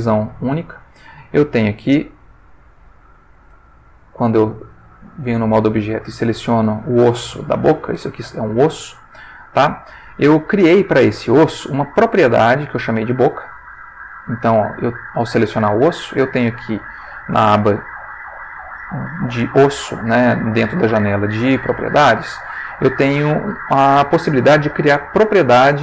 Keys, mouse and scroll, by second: 0.9 ctrl+shift+middle click, 1.9 ctrl+shift+middle click, 4.3 click, 4.8 click, 6.2 click, 8.6 g, 9.7 Escape, 16.5 click.